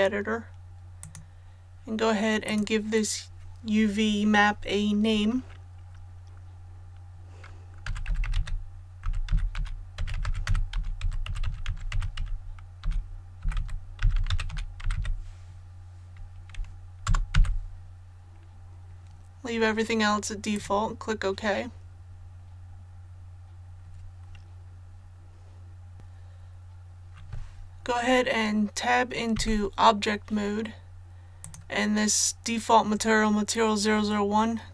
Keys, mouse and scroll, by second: 7.8-14.9 typing, 17.0 typing, 20.5 click, 22.0-22.8 scroll down 1, 29.3 Tab, 31.4 click.